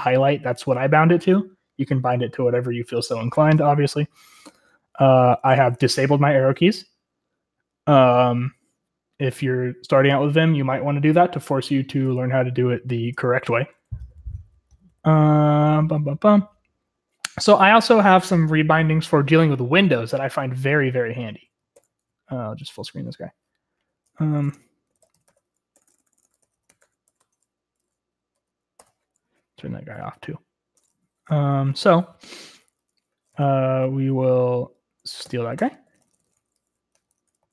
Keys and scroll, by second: 5.2-7.3 typing, 13.4 Escape, 13.8-16.4 typing, 17.7 j, 22.0 ctrl+d, 23.1 super+m, 24.2-28.8 typing, 28.4 Menu, 31.5-32.6 typing, 34.2-37.5 typing.